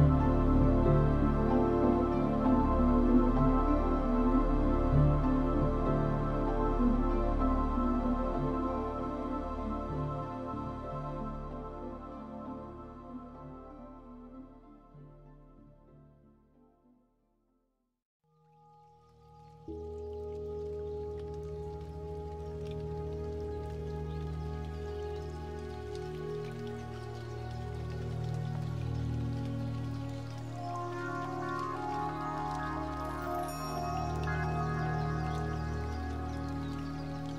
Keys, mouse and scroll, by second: 9.9 Escape, 13.1 click.